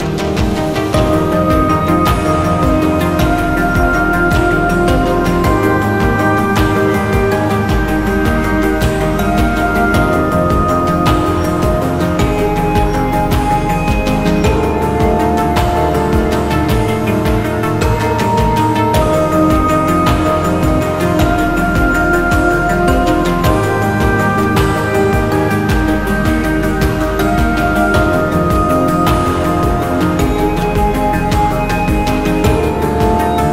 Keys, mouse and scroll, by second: 2.0-3.6 scroll down 1, 5.4-6.2 scroll up 1, 6.2 double click, 10.6-12.9 scroll down 1, 13.2-13.8 scroll down 1, 13.8-16.4 scroll down 1, 16.4-18.5 scroll up 1, 18.9 typing, 19.2 Return, 21.0 scroll down 1, 21.9-24.4 scroll up 1, 24.4-26.8 scroll down 1, 26.8-27.2 scroll down 1, 27.2 ctrl+z, 28.3 shift+click, 31.6 shift+click.